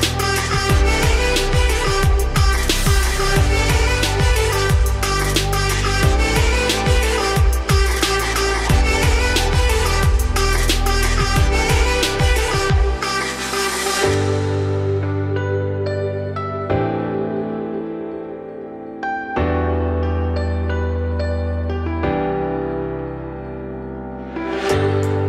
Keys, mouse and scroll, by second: 0.1 click, 0.4 scroll down 2, 0.6 middle click, 0.8-1.1 scroll up 2, 1.1-1.7 shift+middle drag, 1.7 scroll down 2, 2.0-3.0 middle drag, 3.0-3.5 scroll down 1, 3.5 click, 3.8 shift+middle drag, 4.0-5.0 scroll up 2, 5.0 click, 5.6-8.4 drag, 8.4 alt+x, 9.9 shift+middle drag, 10.2-10.6 scroll up 2, 10.6 shift+middle drag, 10.8-11.6 scroll up 2, 11.6 scroll down 2, 11.8-13.6 middle drag, 13.6-16.7 shift+drag, 18.1 click, 18.6 scroll down 6, 18.8-19.2 middle drag, 19.2-19.5 scroll down 3, 19.5 shift+middle click, 19.7-20.3 scroll up 2, 20.4 click, 21.1-21.4 scroll up 2, 21.4 alt+x, 23.1 shift+middle drag, 23.4-25.0 scroll up 4, 23.8-24.2 shift+middle drag, 25.0-25.2 scroll down 6.